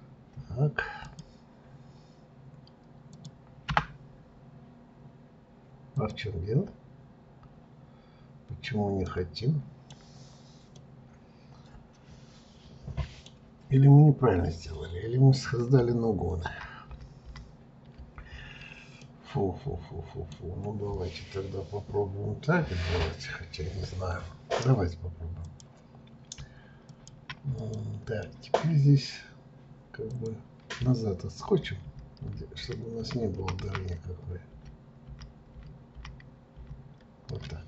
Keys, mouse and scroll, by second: 5.9 click, 9.0-13.9 middle drag, 19.0-22.0 middle drag, 25.4 click, 26.9 shift+click, 27.6 click, 28.2 middle click, 29.1-30.1 scroll down 2, 30.1 click, 31.4-35.0 ctrl+z, 36.5 ctrl+z.